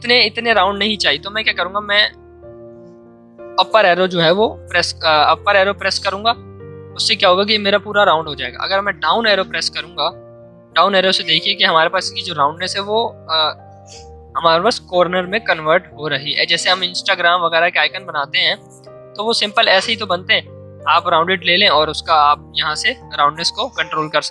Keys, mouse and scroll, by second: 2.0 Up.